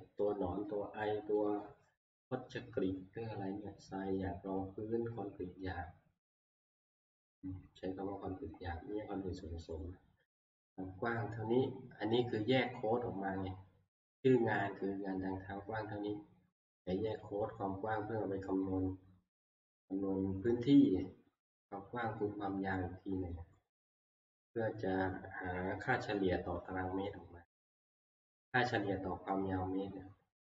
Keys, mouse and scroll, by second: 1.4 middle click, 4.0-6.4 middle drag, 17.2-22.2 drag, 24.0-26.9 scroll, 29.8-30.5 scroll down 13.